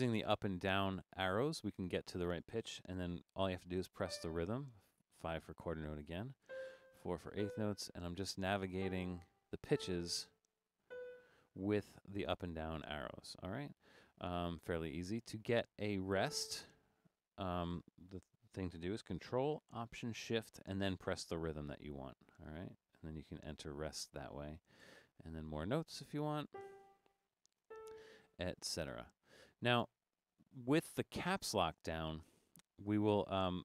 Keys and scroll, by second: 0.3 Up, 0.5 Up, 0.7 Up, 1.0 Up, 1.3 Up, 1.6 Up, 4.0 5, 5.6 Down, 6.4 4, 6.9 Down, 7.4 4, 7.7 Down, 7.9 Down, 8.8 4, 9.3 Up, 9.7 4, 10.4 Up, 10.9 5, 11.9 Down, 12.1 Down, 12.3 Up, 12.6 Up, 15.2 Down, 16.1 5, 21.8 ctrl+alt+shift+5, 23.7 ctrl+alt+shift+5, 26.0 Down, 26.6 4, 26.8 Up, 27.7 4.